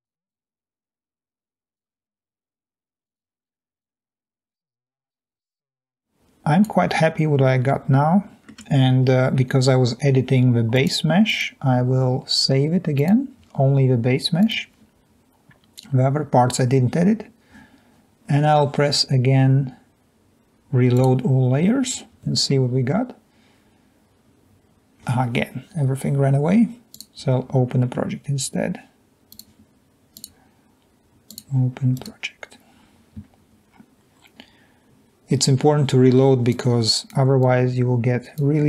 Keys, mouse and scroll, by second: 0.1 click, 0.4 drag, 2.4 Delete, 3.1 click, 4.7 click, 5.8 click, 6.3-7.3 drag, 8.1-9.2 middle drag, 15.1 click.